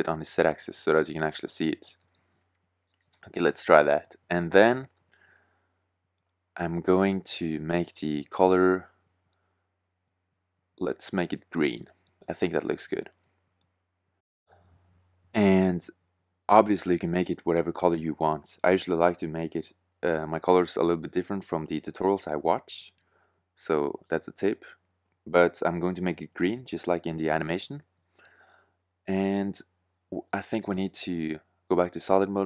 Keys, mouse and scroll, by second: 5.2 middle drag, 5.7 middle click, 8.4 middle click, 13.4 middle click, 13.5 middle click, 28.6 middle click, 32.2 shift+z.